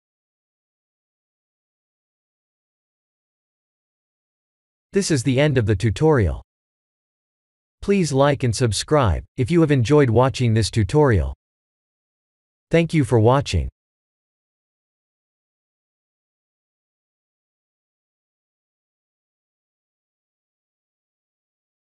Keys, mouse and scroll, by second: 1.7 click, 2.0 click, 2.9 ctrl+s.